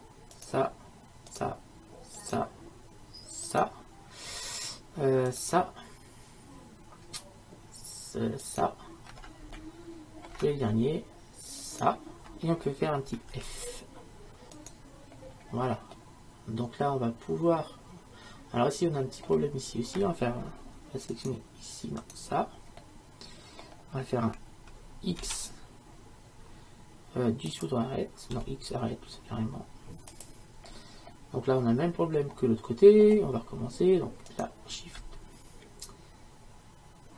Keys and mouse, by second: 8.5-9.6 right drag, 9.6-11.7 middle drag, 11.7-13.3 right drag, 13.4 f, 13.5 right click, 14.6-16.2 right drag, 16.2 middle click, 17.7-18.8 middle drag, 21.2-25.3 right drag, 25.3 x, 28.4 x, 31.1-34.3 middle drag, 34.3-36.2 drag.